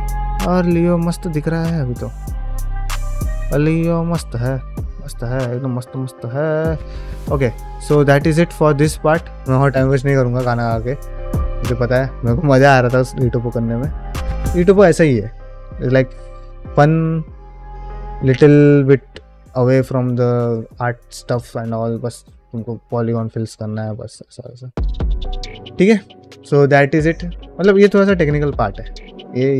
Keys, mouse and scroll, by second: 1.0 scroll up 1, 1.5-1.8 shift+middle drag, 2.0-3.7 middle drag, 3.9 scroll down 1, 4.1 middle click, 4.6 scroll down 1, 4.8 middle click, 5.3 click, 5.6 shift+middle click, 5.9 middle drag, 6.2 shift+middle drag, 6.6 ctrl+middle drag, 7.1 ctrl+space, 7.7 ctrl+middle drag, 8.0 shift+middle drag, 8.5 ctrl+middle click, 8.7 shift+middle click, 9.4-9.7 shift+middle drag, 15.5-21.8 middle drag, 22.1-22.4 middle drag, 23.3 shift+middle drag, 23.8 ctrl+middle click, 24.1 shift+middle click, 24.4-24.9 middle drag, 25.1 shift+middle click, 25.4 ctrl+middle click, 25.7 shift+middle click.